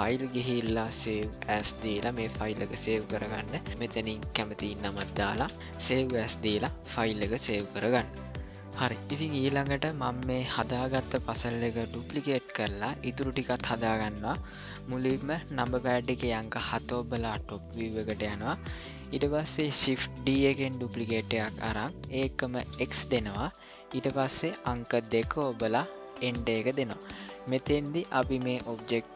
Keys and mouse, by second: 0.1-1.6 drag, 16.5 KP_7, 18.3-19.3 shift+middle drag, 20.2 shift+d.